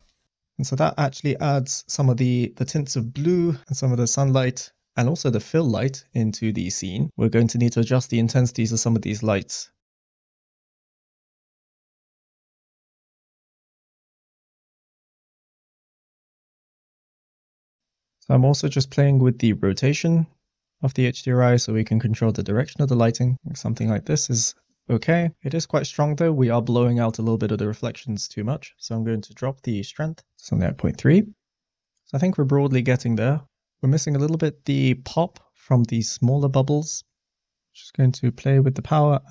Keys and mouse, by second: 3.3 click, 10.2 click, 11.3 s, 11.7 g, 11.8 z, 12.4 click, 13.2-17.8 drag, 18.6 middle click, 19.7-24.3 drag, 25.1 middle click, 25.4 middle click, 29.6 click, 37.1 click, 39.0-39.3 drag.